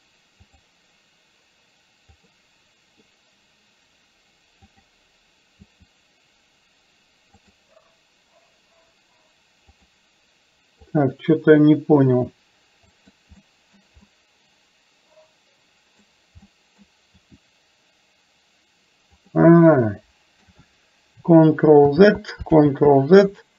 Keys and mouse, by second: 0.6 click, 2.3 click, 4.8 click, 5.8 r, 9.8 click, 10.9 click, 12.2 r, 13.6 middle click, 14.2-16.1 middle drag, 16.5 middle click, 17.2 r, 19.5 middle click, 21.9 ctrl+z, 22.7 ctrl+z.